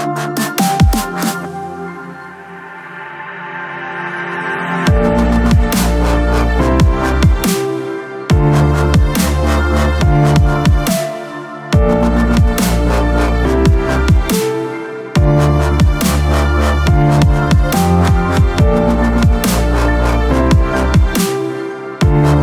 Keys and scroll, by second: 7.5 ctrl+KP_0, 7.9 KP_Multiply, 8.2 n, 9.1 Escape, 10.6 ctrl+KP_0, 13.9 b, 18.9 ctrl+i, 19.9 ctrl+KP_Subtract, 20.2 KP_0, 20.6 KP_0, 20.9 KP_0.